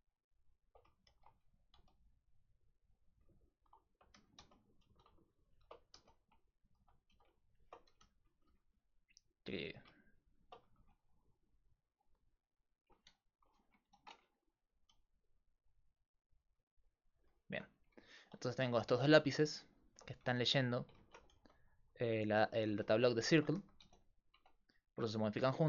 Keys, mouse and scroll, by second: 1.1 shift+d, 3.5 click, 4.2 g, 4.9 a, 6.0-8.5 typing, 9.6 a, 10.8 r, 14.9-16.8 d, 15.1 click, 17.2 d, 17.3 d, 17.6 Tab, 18.9 Tab, 19.2 a, 20.3 f, 21.0 ctrl+z, 21.4 g, 22.3 a, 22.8 z, 23.2-24.9 drag, 23.6 g, 24.4 Tab.